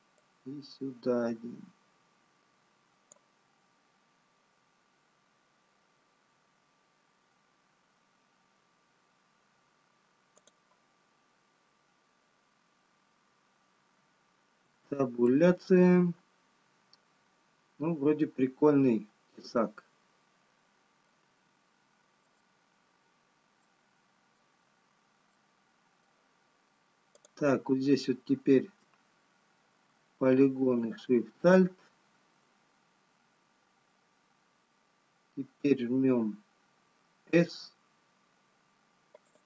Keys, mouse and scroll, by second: 11.4 click, 13.9-14.5 scroll down 2, 16.0 Tab, 16.0 middle click, 22.9 Tab, 22.9 middle click, 22.9-24.7 scroll up 1, 24.7 middle click, 24.7-25.2 scroll down 1, 26.1 middle click, 28.2 click, 31.5 alt+shift+click.